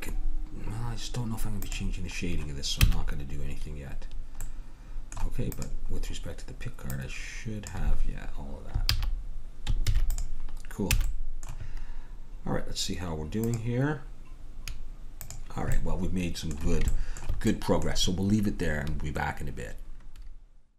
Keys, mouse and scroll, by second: 1.6-3.5 drag, 2.8 a, 5.6-8.6 drag, 8.9 ctrl+z, 9.8 ctrl+s, 10.9 a, 11.1 middle click, 17.7-19.4 middle drag.